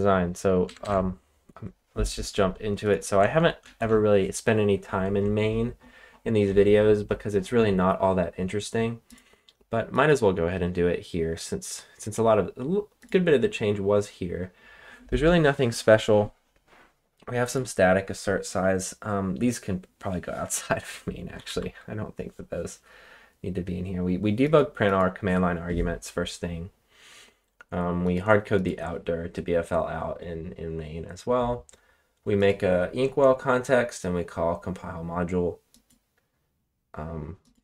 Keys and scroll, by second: 0.6 super+Tab, 0.8 super+Tab, 3.7 shift+], 21.1-21.9 typing.